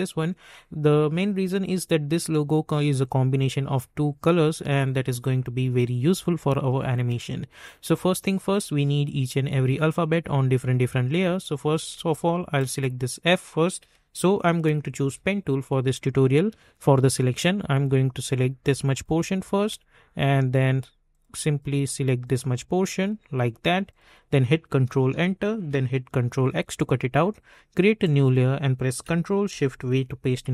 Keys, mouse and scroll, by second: 10.7 alt+scroll up 1, 11.9 space, 12.1 click, 12.4 space, 15.0 p, 17.7 click, 24.9 ctrl+Return, 26.3 ctrl+x, 28.0 click, 29.9 ctrl+shift+v.